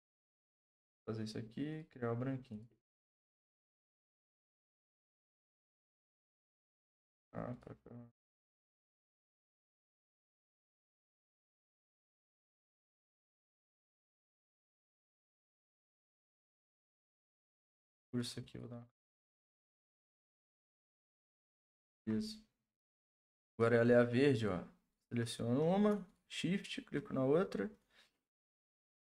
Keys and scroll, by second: 10.6 ctrl+z, 13.3 ctrl+Return, 21.8 ctrl+d.